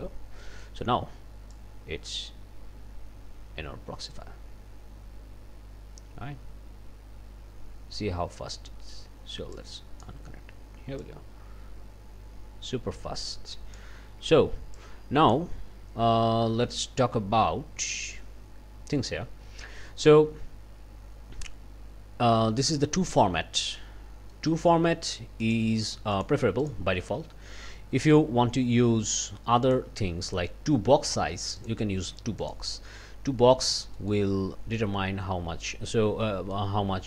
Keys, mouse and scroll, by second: 0.4 click, 1.5-8.5 drag, 9.5 click, 11.0-13.9 drag, 14.7 click, 23.8 scroll down 2, 24.3 middle click, 25.4 click, 26.2 click, 26.6 click, 29.7 click, 31.6 click, 32.4 click, 33.6 scroll up 2, 34.0 click, 35.9 scroll down 2, 36.2 click.